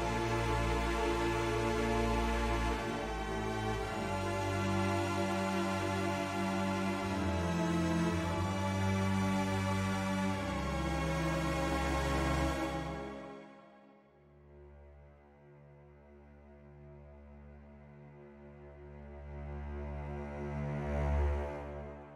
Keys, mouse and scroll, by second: 0.2 middle click, 0.9 s, 1.7 click, 2.2 ctrl+z, 2.7 middle click, 3.8 e, 4.8 s, 6.0 click, 6.5 middle click, 9.9 middle click, 10.8 click, 12.2 ctrl+z, 12.9 ctrl+z, 14.8 e, 16.2 x, 17.9 s, 18.8 click, 19.3 middle click, 19.5 middle click, 20.0 ctrl+z, 20.5 middle click, 21.4 click.